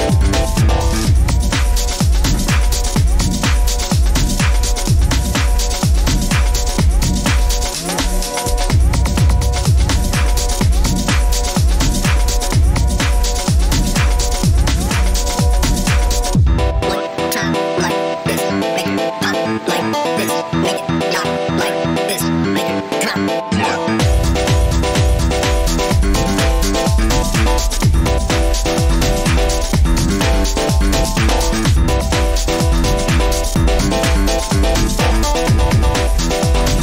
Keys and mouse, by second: 1.1 shift+click, 2.0-2.5 shift+middle drag, 5.9 click, 7.0 click, 7.6-8.6 shift+drag, 9.7 shift+click, 11.7-14.9 right drag, 15.9-17.5 middle drag, 20.9 click, 21.8-22.2 middle drag, 22.5-22.8 shift+middle drag, 23.3 middle click.